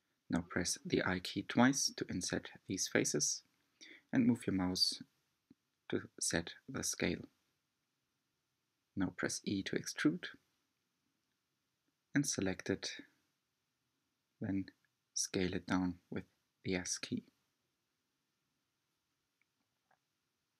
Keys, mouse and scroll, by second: 1.6 typing, 7.1-9.1 middle drag, 9.1 e.